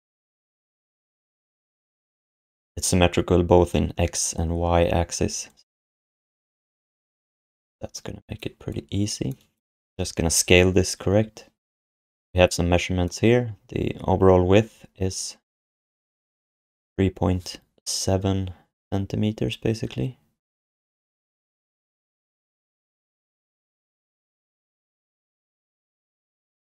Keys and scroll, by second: 24.7 ..